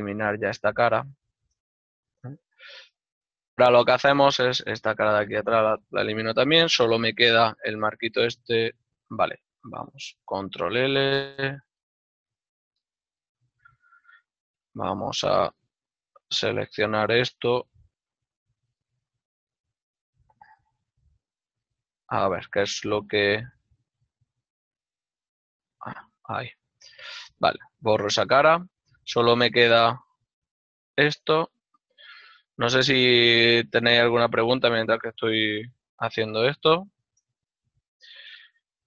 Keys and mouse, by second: 0.0 alt+right click, 0.3 x, 1.7 click, 1.9 shift+middle click, 5.7 click, 5.9 right click, 6.6 l, 7.2 g, 11.4 ctrl+middle click, 12.2 z, 13.2 ctrl+middle click, 15.0 middle click, 16.6 right click, 16.8 l, 18.4 g, 19.1 h, 19.3 right click, 22.0 ctrl+z, 22.4 middle click, 23.9 z, 24.8 click, 25.5 h, 25.9 right click, 32.3 click, 32.4 alt+right click, 32.6 ctrl+middle click, 34.4-36.9 typing, 35.1 click, 37.1 Return, 37.1 KP_Enter, 38.3 x.